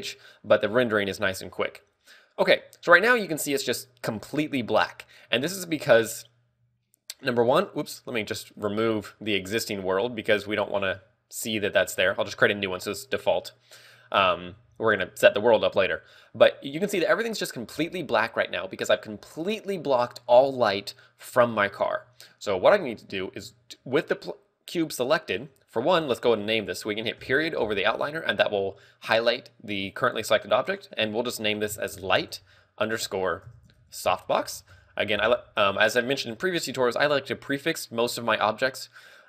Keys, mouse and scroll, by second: 2.5 shift+middle click, 7.7 click, 9.0 shift+click, 11.8 click, 14.5 scroll down 2, 15.1 scroll down 3, 27.6 KP_Decimal, 31.1 ctrl+click.